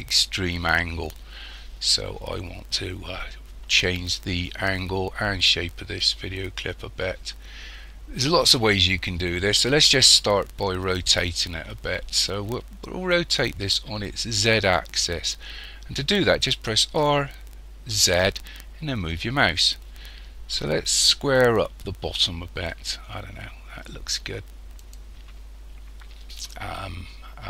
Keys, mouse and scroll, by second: 16.9 r.